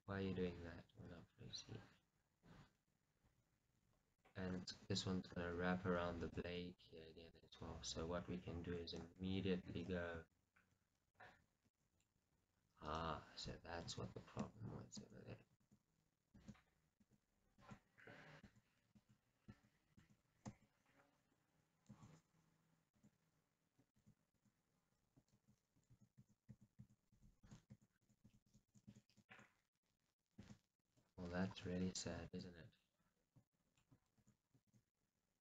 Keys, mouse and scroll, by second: 0.3 r, 1.3 g, 4.4 click, 5.0 r, 6.6 click, 6.8 g, 7.5 click, 8.3 scroll, 11.8 g, 14.2 ctrl+z, 23.1 shift+z, 24.2 ctrl+z, 25.5 shift+z, 26.1 ctrl+z, 32.5 shift+z, 32.7 scroll up 1, 33.6-35.4 shift+middle drag, 34.4 shift+z.